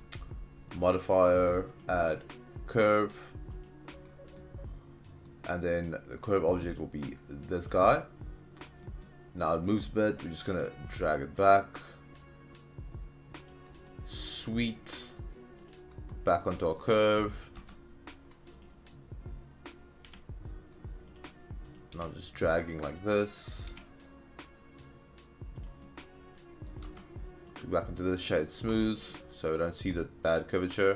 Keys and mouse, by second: 0.9 click, 1.9-3.6 drag, 4.4-5.3 middle drag, 6.5 click, 8.9 middle click, 9.6 middle click, 10.9-13.5 drag, 13.9-15.2 middle drag, 15.7 click, 16.1-16.4 middle drag, 16.6 shift+middle drag, 16.9 middle click, 17.7 Tab, 18.6 click, 20.1 g, 21.1 click, 21.7 click, 21.9 g, 22.9 drag, 23.6 click, 23.8 g, 25.6 click, 25.8-26.7 middle drag, 26.8 Tab, 27.5 click, 28.3 right click, 29.1-30.9 middle drag.